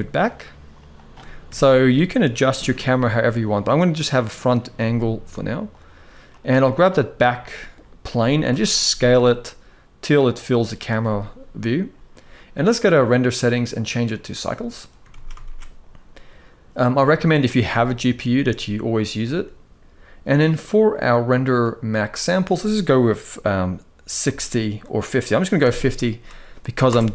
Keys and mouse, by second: 1.2 KP_0, 2.3 g, 4.4 g, 6.0 click, 7.2 middle click, 8.2 KP_0, 8.6 s, 13.5-14.1 drag, 14.8 ctrl+s, 15.0 ctrl+s, 15.1 ctrl+s, 16.5-19.1 drag, 21.9-26.6 drag.